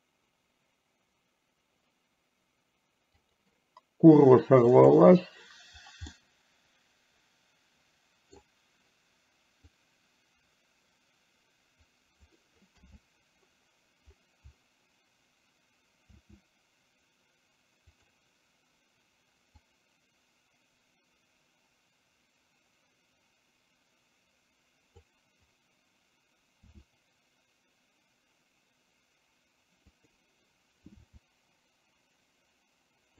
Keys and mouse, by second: 3.3 click, 6.2-8.4 middle drag, 9.9-12.4 drag, 16.3 s, 19.8-25.2 drag, 26.8 s, 31.2 r.